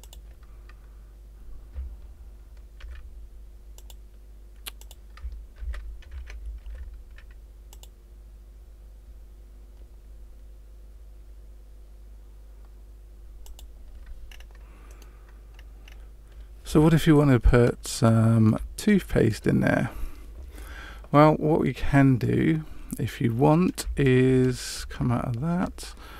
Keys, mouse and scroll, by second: 2.7 ctrl+r, 5.6 ctrl+z, 6.6 ctrl+r, 14.2-14.8 scroll down 3, 14.8 middle click, 15.8-17.3 scroll up 1, 17.4 middle click, 18.0 middle click, 18.7 shift+middle click, 22.2 middle click, 24.0 shift+middle click, 24.8 Tab.